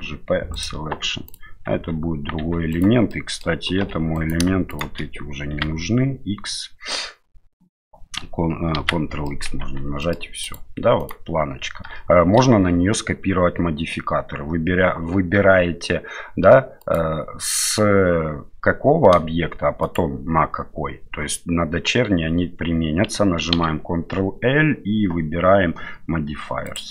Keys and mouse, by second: 1.3 right click, 1.7 Tab, 2.4 Tab, 2.7 right click, 3.1 middle click, 3.8 2, 4.1 right click, 4.7 shift+right click, 5.5 x, 8.8 ctrl+x, 9.2 middle click, 9.6 Tab, 10.0 middle click, 10.4 right click, 11.0 right click, 16.8 right click, 19.8 shift+right click, 23.6 ctrl+l.